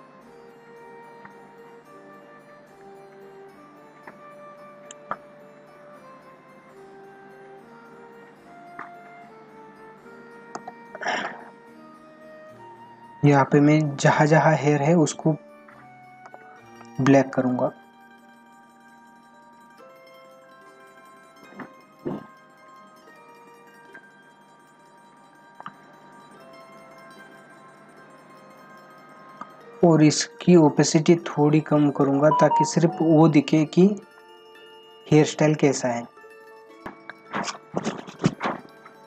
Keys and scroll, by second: 8.8 ctrl+=, 14.3 ], 16.5 space, 28.6 ctrl+=.